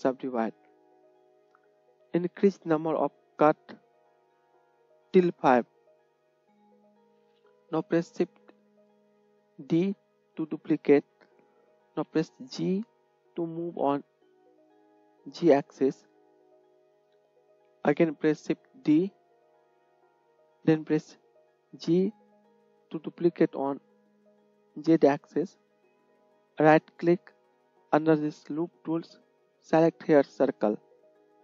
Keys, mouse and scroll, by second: 0.4 click, 0.8-3.3 right drag, 3.3-4.5 middle drag, 4.5-7.0 drag, 6.3 g, 7.0-26.6 middle drag, 9.6 shift+d, 18.8 shift+d, 26.6-31.4 drag.